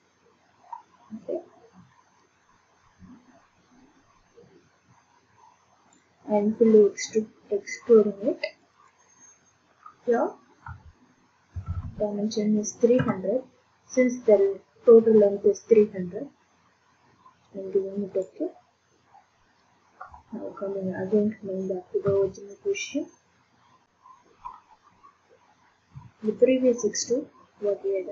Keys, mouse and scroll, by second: 0.4 middle click, 5.9 click, 8.6 click, 8.9 click, 10.6-11.5 typing, 13.0 Return, 18.2 click, 22.1 ctrl+d, 23.8 click, 26.4 click.